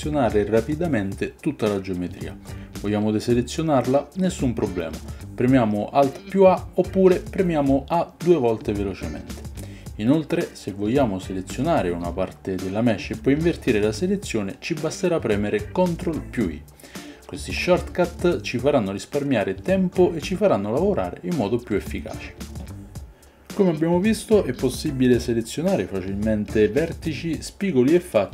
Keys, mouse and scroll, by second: 6.9 alt+a, 8.6 a, 8.9 a, 13.1 3, 13.4 click, 16.8 ctrl+i, 25.0-25.9 drag, 26.5 click.